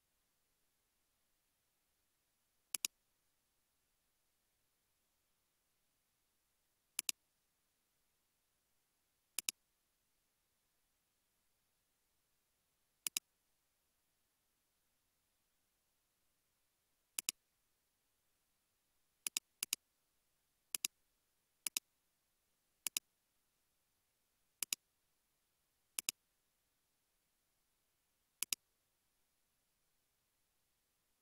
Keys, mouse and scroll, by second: 3.3-4.3 typing, 7.4-8.2 typing, 18.2-19.0 scroll down 1, 19.0 typing, 19.7 double click.